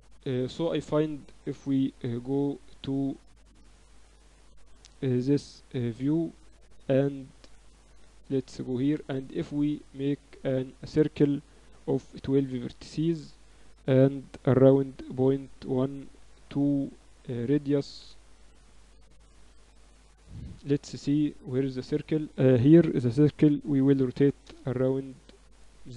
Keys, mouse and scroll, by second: 1.4 KP_3, 2.2 z, 3.2-5.0 middle drag, 4.4 click, 4.8 a, 5.0-6.2 drag, 6.3 a, 7.1 a, 7.6-9.6 drag, 8.7 shift+a, 11.3 F6, 19.3 KP_7, 23.2 r.